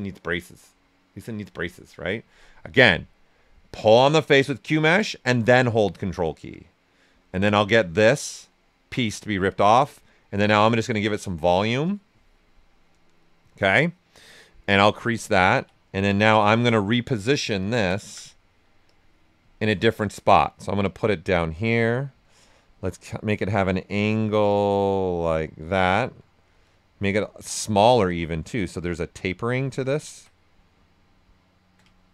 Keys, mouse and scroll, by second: 3.8-10.3 drag, 10.3-12.7 drag, 12.7-14.6 right drag, 14.6 click, 15.1 ctrl+right click, 16.1 w, 17.6 ctrl+click, 20.8-22.2 drag, 22.2-26.1 shift+drag, 26.1 click, 27.2 ctrl+right click, 28.0-29.7 drag, 29.7-31.9 ctrl+right drag, 31.9-32.1 ctrl+shift+right drag.